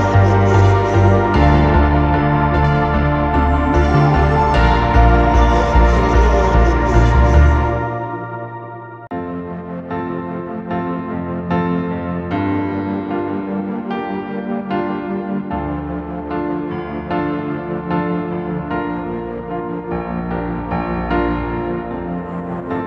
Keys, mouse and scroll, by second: 9.7-10.5 typing, 12.4 double click, 15.2-15.7 typing, 18.2 typing, 19.8 typing.